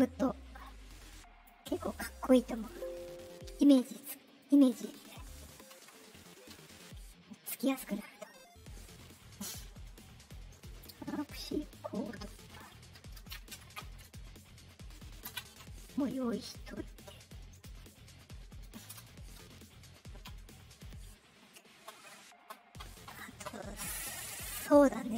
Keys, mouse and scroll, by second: 0.6 click, 2.5 click, 4.3 click, 4.8 click, 5.6 Return, 12.4 middle click, 14.7 middle click, 15.2 ctrl+v, 15.5 Return, 16.7 scroll up 2, 17.5 click, 18.5 click, 18.9 space, 24.9 click.